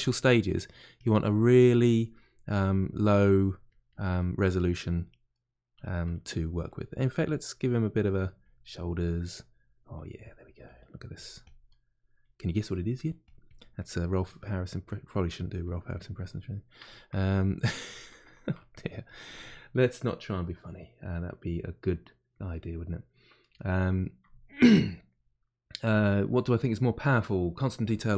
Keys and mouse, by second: 0.4 middle click, 1.0 click, 1.7 middle click, 2.3 click, 3.0 middle click, 3.6 click, 4.1 middle click, 4.8 click, 5.3-7.2 middle drag, 7.2-9.2 drag, 9.2 middle click, 9.9 click, 10.6 middle click, 11.2 click, 11.6 middle click, 12.2-13.7 drag, 13.7-15.6 middle drag, 15.6 click, 16.2-17.6 middle drag, 17.6 click, 18.3 ctrl+middle click, 19.0-22.6 drag, 22.6-28.1 middle drag.